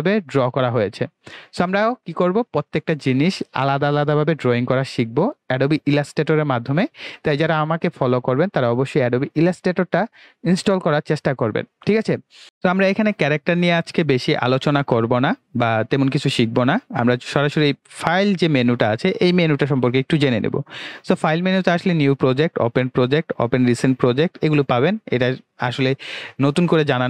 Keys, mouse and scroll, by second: 12.4 click, 19.5 click.